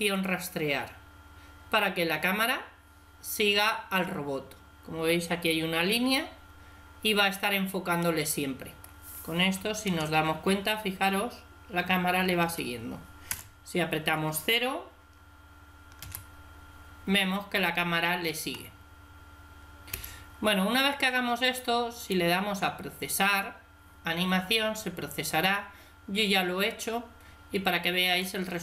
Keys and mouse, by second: 6.9-9.8 middle drag, 9.8 alt+a, 10.0 alt+q, 12.4 Escape, 13.3 KP_0, 16.0 alt+a, 19.9 Escape, 21.9-23.6 drag.